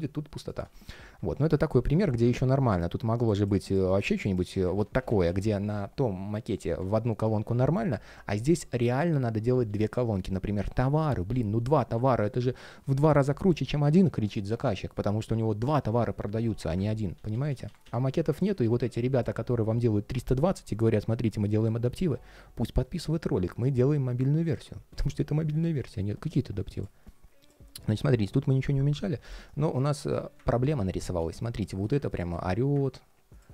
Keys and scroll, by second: 4.5 super+d, 9.4 super+z, 16.9 super+z.